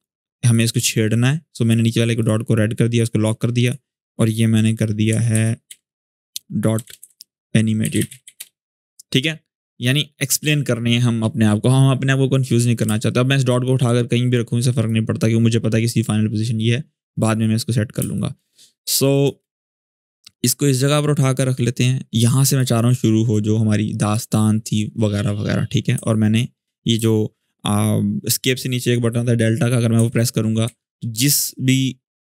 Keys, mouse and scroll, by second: 0.6 click, 4.8 Return, 5.1 Right, 6.3-8.5 typing, 12.6 space, 12.7 click, 13.1 space, 13.4-14.7 drag, 17.7 click, 17.7 space, 17.9 click, 18.4 scroll down 1, 18.6 space, 18.8 click, 19.1 space, 20.0-22.5 drag, 23.3-24.0 drag, 29.7 `.